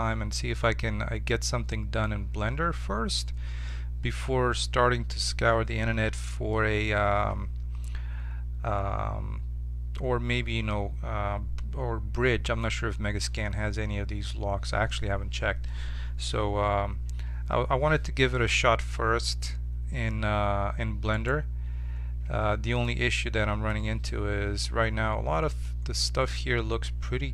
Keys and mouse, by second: 21.1-22.8 right drag, 22.2 Tab, 23.8 Tab.